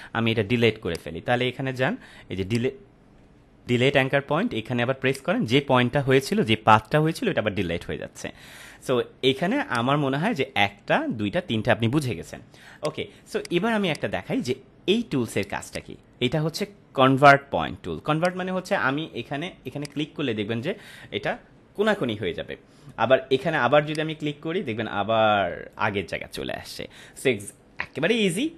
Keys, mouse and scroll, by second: 0.8 right click, 2.4 click, 3.7 ctrl+m, 5.0 click, 9.7 right click, 12.6 space, 12.7 click, 13.0 space, 13.4 click, 13.4 space, 13.8 click, 13.9-14.4 space, 15.6 right click, 18.4 click, 23.8-25.7 drag.